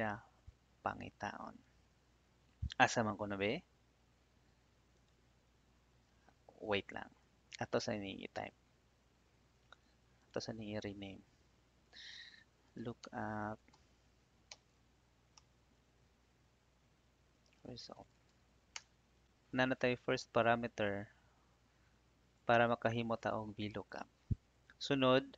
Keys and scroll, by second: 8.3 shift+p, 9.6 Escape, 10.7 r, 12.7 shift+l, 13.0 o, 15.2 a, 15.3 BackSpace, 17.4-18.7 typing.